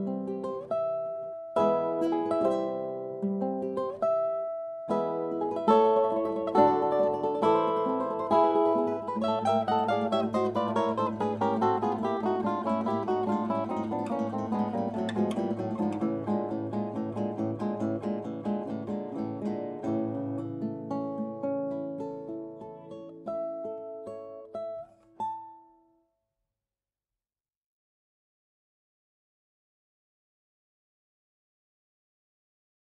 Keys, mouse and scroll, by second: 0.0-1.5 right drag, 1.1 middle click, 1.7 right click, 1.7 middle click, 1.9 right click, 2.0 middle click, 2.1 right click, 2.7-5.2 right drag, 5.2-6.2 drag, 7.5-19.4 right drag, 10.8-19.9 drag, 18.8-21.0 middle drag, 22.9-25.9 right drag, 23.7-25.9 drag, 25.5-27.5 middle drag, 27.7 middle click, 29.5 Tab, 30.2-32.8 right drag, 32.1-32.8 drag.